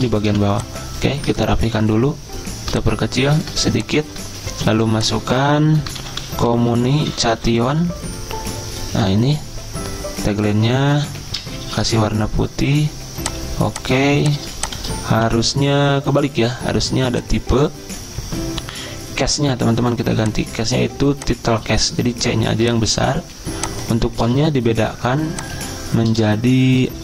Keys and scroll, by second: 1.6 ctrl+g, 4.7-8.2 typing, 11.1 Escape, 11.8 d, 14.0 z, 15.1 v, 18.9-19.6 typing.